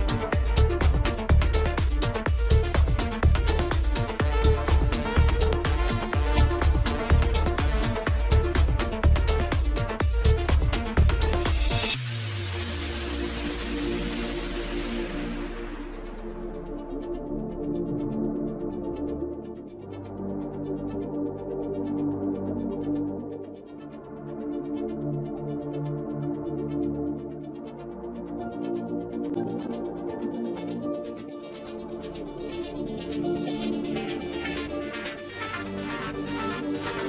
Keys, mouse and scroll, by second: 2.7 click, 3.7 click, 4.7 click, 11.8-12.4 middle drag, 12.4-13.4 scroll up 6, 13.1-17.8 middle drag, 17.8-19.7 scroll up 1, 19.7-20.3 scroll down 8, 20.3 click, 21.9 KP_0, 31.7 click, 32.9-37.0 drag.